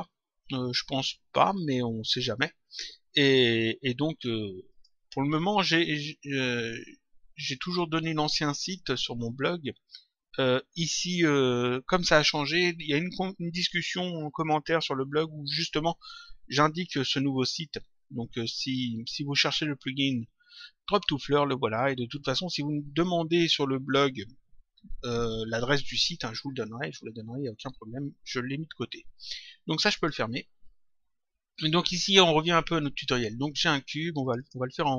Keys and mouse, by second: 4.7 click, 29.9 click, 34.2 click.